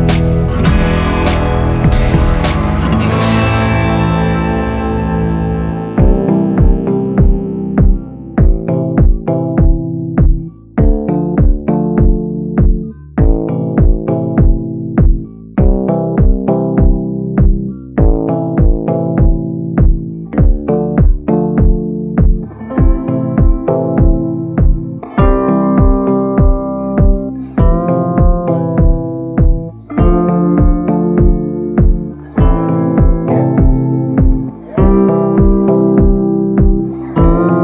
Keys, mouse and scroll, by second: 26.8 ctrl+g.